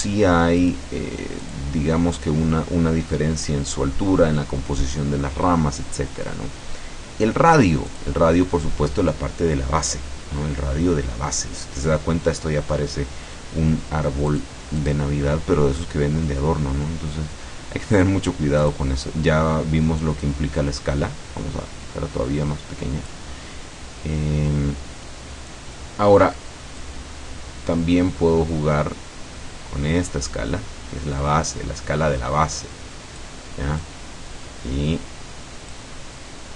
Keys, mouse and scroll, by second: 0.7 click, 1.5 click, 7.6 click, 14.4 click, 14.8 click, 18.7 click, 20.3-23.3 drag, 26.8-33.4 drag, 33.8-36.0 drag.